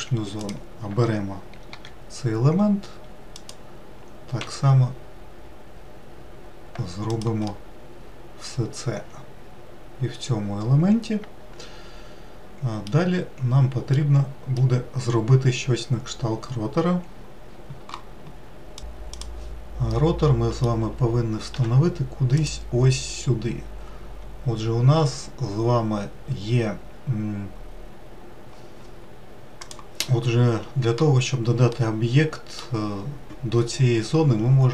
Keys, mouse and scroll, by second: 0.7 click, 2.1 i, 4.7 e, 7.8-11.0 middle drag, 14.3-16.5 middle drag, 16.5-19.1 scroll down 2, 19.1 scroll down 1, 19.9-21.5 middle drag, 21.5 2, 22.3 click, 31.6-34.6 middle drag.